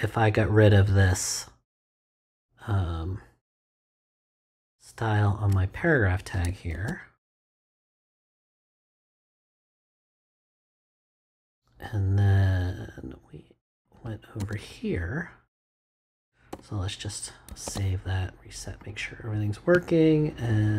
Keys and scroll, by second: 6.7 super+x, 9.0 BackSpace, 14.4 space, 16.5 BackSpace, 17.5 super+BackSpace, 17.6 super+s.